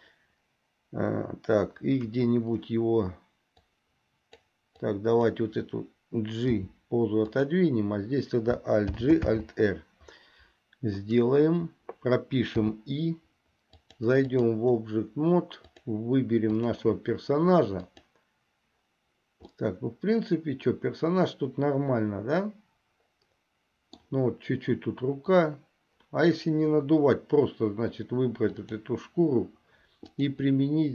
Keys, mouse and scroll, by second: 3.8 click, 5.1 click, 6.6 g, 9.1 alt+g, 9.5 alt+r, 12.9 i, 13.9 click, 15.9 click, 16.8 click, 18.1 click, 19.8-24.4 middle drag, 28.6 click, 30.2-30.9 drag.